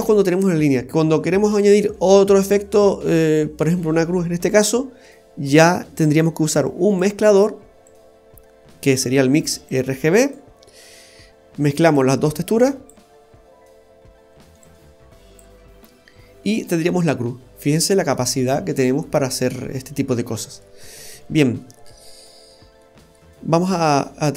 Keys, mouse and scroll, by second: 5.5 click, 6.6 click, 7.9 click, 9.7 click, 11.9 click, 14.6 click, 16.6-17.1 scroll down 2, 17.1 middle click, 20.0-20.8 scroll down 2, 20.2 middle click, 20.8-21.3 scroll up 4, 21.6 middle click, 22.0-22.6 scroll up 9, 22.8 middle click, 23.9 click.